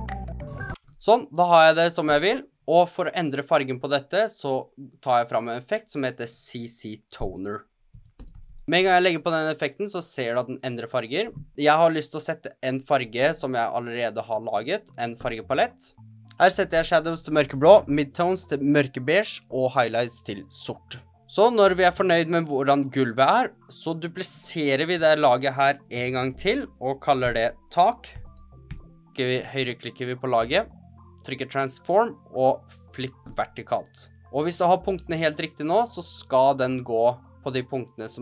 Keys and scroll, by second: 7.2-8.4 typing, 26.1 super+d, 27.2 Return, 27.8-29.1 typing.